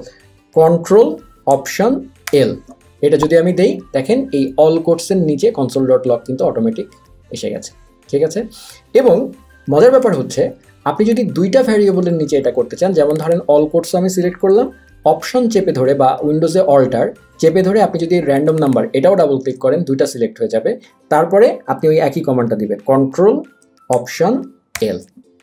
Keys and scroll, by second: 2.4 ctrl+alt+l, 10.2 super+z, 24.8 ctrl+alt+l.